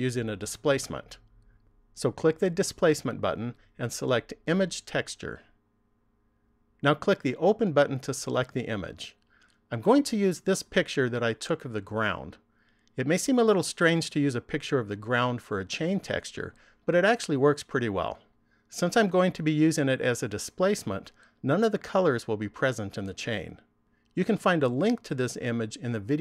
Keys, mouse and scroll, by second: 2.9 click, 8.1 click.